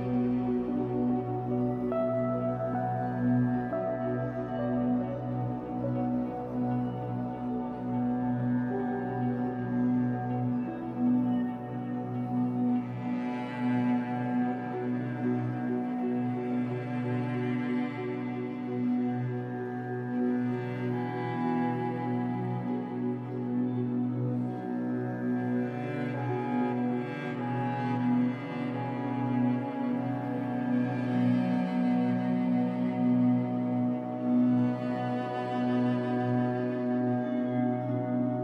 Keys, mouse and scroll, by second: 1.8-5.4 middle drag, 3.7 scroll down 1, 4.2 scroll up 1, 5.4 click, 5.8 middle click, 6.7 alt+click, 7.1 middle click, 7.9 alt+shift+click, 8.3 middle click, 9.2 shift+click, 10.1 middle click, 10.9 shift+click, 11.2 middle click, 11.7 shift+click, 11.9 middle click, 12.9-14.4 shift+drag, 14.4-16.0 middle drag, 15.7 e, 16.0 click, 17.7-26.7 middle drag, 18.1 scroll up 2, 18.6 scroll down 2, 20.4 ctrl+z, 23.9 ctrl+z, 24.8 scroll up 1, 25.6 ctrl+shift+z, 26.7 shift+click, 27.3 scroll down 1, 27.4-29.1 middle drag, 28.7 e, 29.1 click, 29.6 click, 30.9-35.3 middle drag, 34.3-35.3 scroll up 2, 35.3 click, 35.5-36.9 middle drag, 36.4-36.9 scroll up 2, 36.9 click, 37.2 middle click, 37.7-38.4 shift+drag.